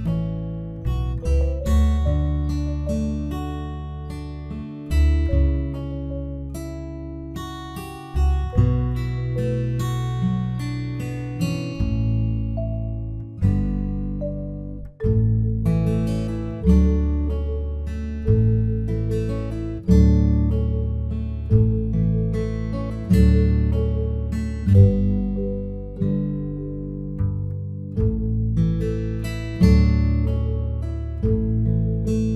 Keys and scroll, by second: 4.8 ctrl+t.